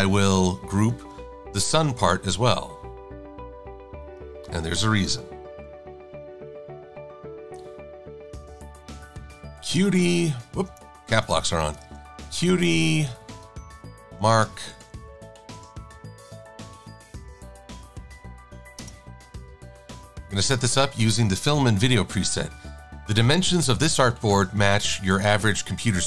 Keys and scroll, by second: 9.4 u, 11.5 BackSpace, 12.9 e, 14.3 r, 15.8-17.6 typing.